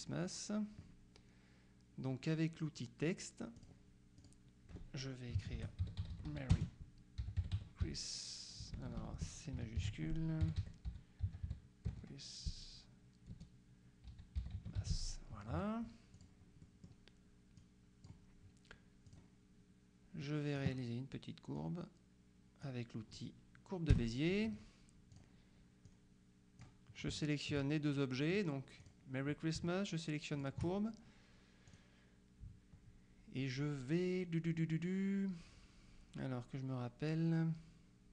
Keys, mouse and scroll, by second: 3.7-4.3 scroll up 2, 4.3 click, 5.4-8.7 typing, 9.9-12.0 typing, 13.4-15.4 typing, 16.2 click, 16.6 scroll down 1, 16.7 middle click, 17.0-17.5 scroll up 1, 17.7 click, 19.2 click, 20.3 click, 21.7-23.2 drag, 24.0 Return, 25.2 click, 25.9-27.2 drag, 27.3 shift+click, 28.4 click, 30.4 shift+click, 31.7 click.